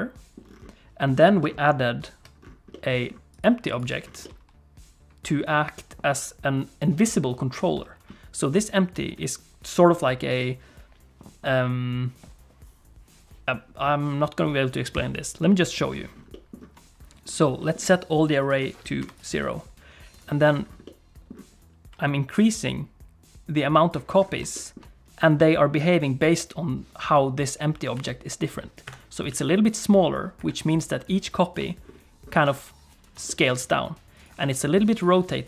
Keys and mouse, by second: 1.9 alt+h, 2.7 middle click, 3.7 click, 4.2-5.4 middle drag, 16.3 middle click, 17.6 middle click, 18.4 click, 20.1 click, 20.8 middle click, 22.4-23.9 drag, 24.5 shift+middle click, 27.9 s, 29.3 s, 30.8 click, 33.3 shift+click, 34.2 click.